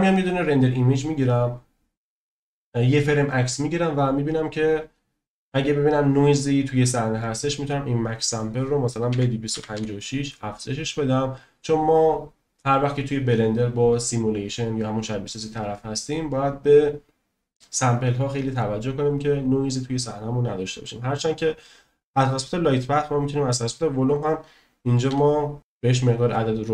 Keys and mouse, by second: 0.6-3.6 drag, 8.4-10.6 drag, 24.3-25.6 drag.